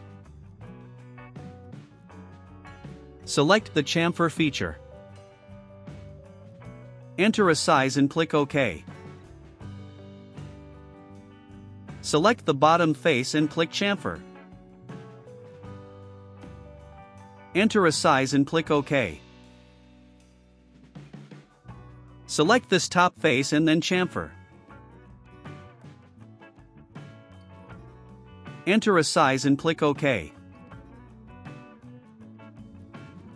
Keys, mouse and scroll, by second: 0.2 click, 2.0 ctrl+click, 5.2 click, 8.2 click, 11.0 scroll down 1, 11.2 click, 12.5 click, 15.7 click, 17.5 3, 18.7 click, 21.5 click, 22.6-23.0 scroll up 2, 23.8 click, 26.5 click, 28.5 0, 29.0 ,, 29.5 6, 30.5 click.